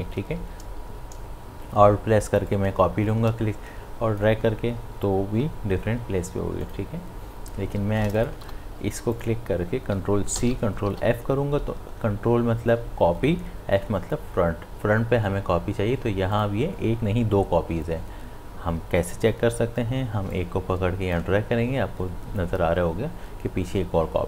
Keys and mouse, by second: 0.4 ctrl+z, 2.5-6.6 alt+drag, 10.4 ctrl+c, 16.4 click, 20.4-23.4 drag.